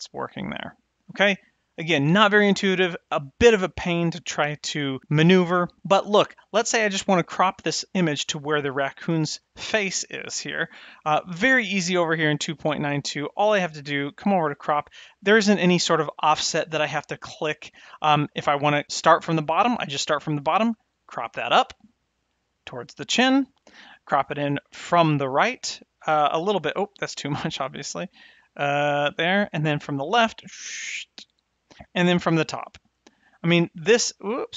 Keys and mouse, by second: 11.7 click, 13.8 click, 19.7-23.7 drag, 25.0-29.0 drag, 30.0-31.7 drag, 33.0-34.5 drag.